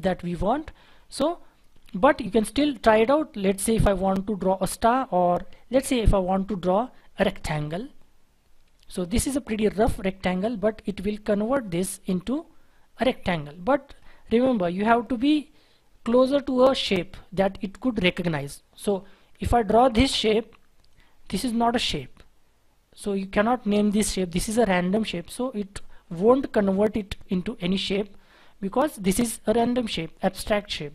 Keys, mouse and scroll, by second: 1.7 scroll down 1, 2.8 scroll down 1, 2.8-3.4 scroll up 1, 3.4-4.3 scroll down 1, 4.3-7.3 scroll up 1, 13.9-15.8 scroll down 1, 15.8-16.6 scroll up 1, 16.6-17.9 scroll down 1, 18.3-19.7 scroll up 1.